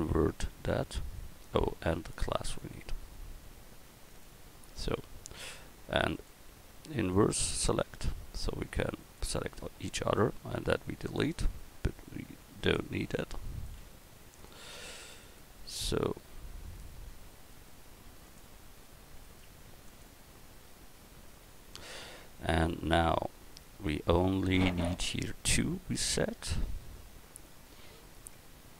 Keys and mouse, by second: 8.4 x, 11.0-18.1 right drag, 12.6-14.5 drag, 14.0 x, 15.6 x, 18.1-19.2 drag, 18.1 x, 19.2 right click, 19.7-21.7 drag, 19.7 x, 22.9 Tab, 23.6 Tab, 26.1 Tab, 28.4 Tab.